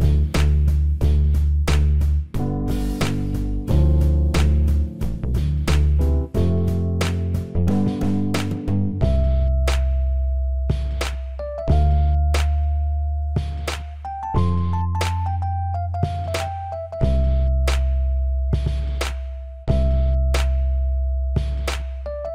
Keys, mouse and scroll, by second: 0.1-1.5 right drag, 1.5 n, 6.5-8.1 drag, 8.1 ctrl+KP_0.